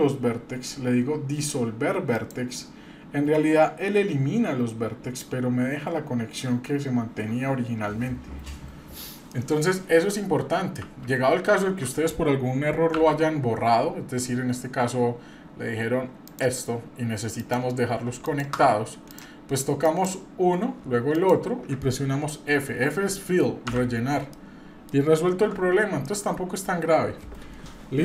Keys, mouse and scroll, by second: 9.3-10.7 middle drag, 11.5 ctrl+z, 12.9 x, 17.3 click, 18.2 shift+click, 19.1 click, 19.8 click, 21.1 shift+click, 23.6 f, 24.3 middle click, 25.3 Tab, 26.0-26.5 middle drag.